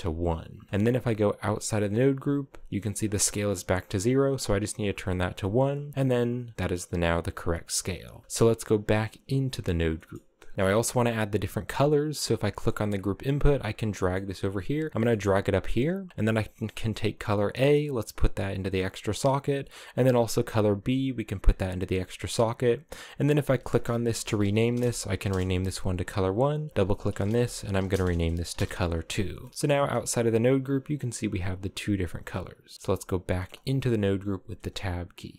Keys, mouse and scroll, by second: 0.5-1.6 middle drag, 1.6 Tab, 3.5-5.5 drag, 6.6 click, 7.8 click, 8.2 Tab, 8.5 Tab, 8.9-9.6 scroll down 5, 9.2 a, 9.6 middle click, 10.5-12.0 scroll down 3, 12.0 right click, 12.2 scroll down 3, 12.4 middle click, 12.8 g, 13.6 middle click, 14.0 g, 14.9-15.8 scroll up 8, 15.3 g, 16.5 click, 18.2-19.9 drag, 20.0 click, 22.8 click, 23.0-26.0 drag, 26.4-29.1 drag, 29.1 middle click, 29.6 Tab, 30.1-31.9 scroll up 1, 31.9 click, 33.1 middle click, 33.4 click, 34.2 Tab.